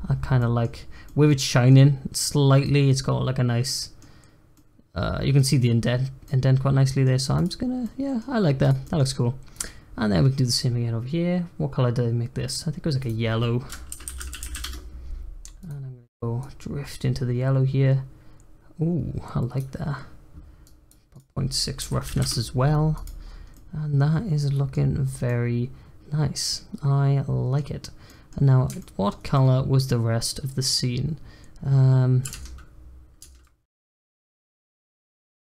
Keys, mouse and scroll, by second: 0.3 middle click, 0.8 scroll up 1, 1.0-6.0 middle drag, 6.0 scroll down 1, 6.2-7.3 middle drag, 7.3 click, 7.6 scroll up 2, 7.8-8.3 middle drag, 8.3-8.6 scroll down 1, 8.6 click, 8.8 middle click, 9.0-9.5 scroll up 1, 9.5 click, 12.4-14.3 drag, 14.3 l, 15.6 click, 20.6-23.0 drag, 23.2 scroll down 2, 23.5-24.8 middle drag, 24.8 scroll up 1, 25.0 scroll down 4, 25.2-27.8 middle drag, 27.8 scroll up 1, 28.0 middle click, 28.4-28.8 scroll up 1, 28.8-30.0 shift+middle drag, 30.0-33.0 scroll down 1.